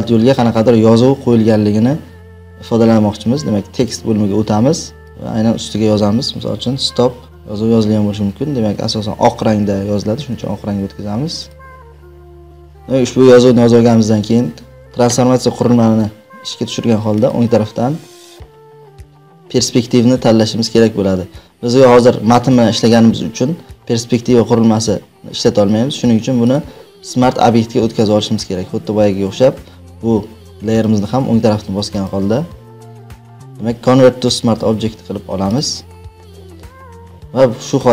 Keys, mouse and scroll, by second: 3.8-5.1 drag, 6.5-7.7 typing, 10.1 ctrl+a, 11.4 click, 12.5 ctrl+t, 12.5 click, 12.7 click, 14.6 ctrl+t, 17.2 right click, 26.6-29.3 drag, 30.8 right click, 32.0 right click, 36.2 click, 37.7 click.